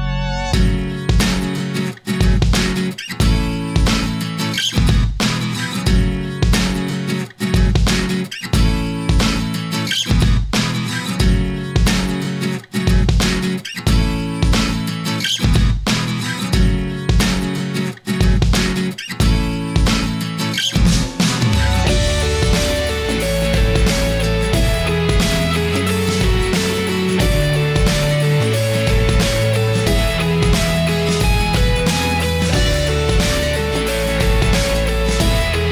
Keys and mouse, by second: 2.3-4.7 drag, 5.9 click, 7.2 middle click, 8.4-10.1 shift+middle drag, 10.8 shift+a, 15.1-15.6 ctrl+right drag, 16.3 click, 20.1-23.5 drag, 23.9-24.4 middle drag, 25.0-25.9 middle drag, 26.4 middle click, 27.5-29.1 drag, 30.1 click, 30.3-31.0 right drag, 31.8-35.7 drag.